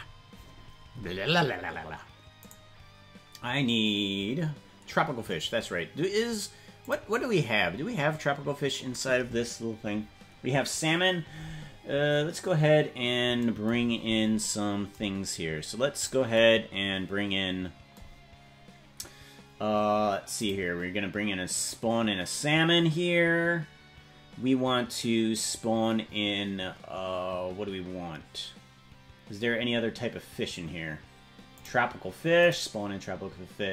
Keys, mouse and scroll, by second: 2.6 right click, 6.8 click, 7.6-8.8 scroll down 8, 14.1-14.4 scroll down 5, 16.0 click, 20.4 click, 21.5 click, 25.2 scroll up 1, 26.0-26.4 scroll down 2, 26.8-27.1 scroll down 2, 28.0-28.8 scroll down 2, 28.8-31.2 scroll down 11, 31.6 click, 32.4 click.